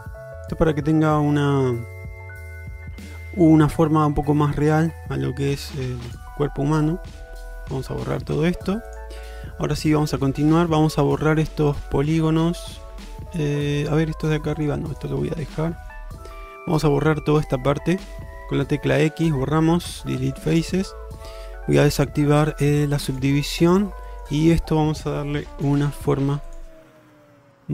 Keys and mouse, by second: 14.6 shift+click, 15.0 shift+click, 16.9 shift+middle drag, 19.1 x, 23.2 click, 24.1 shift+middle click, 25.7 1, 27.6 g.